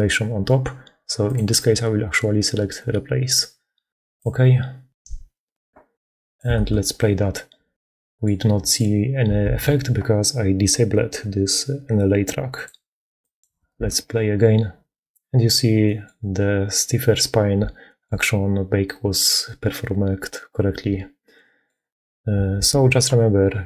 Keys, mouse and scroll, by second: 5.1 middle click, 6.4 shift+space, 7.9 click, 9.3 shift+space, 13.6 shift+space, 17.8-21.6 shift+drag, 22.5 shift+space.